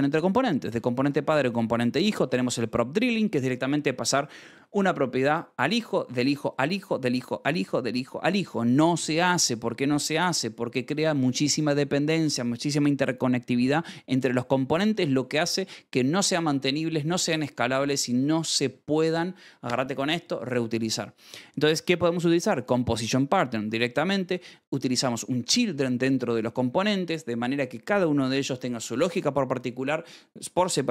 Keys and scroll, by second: 0.2-2.6 typing, 21.7 Escape, 21.8 j, 23.5 Escape.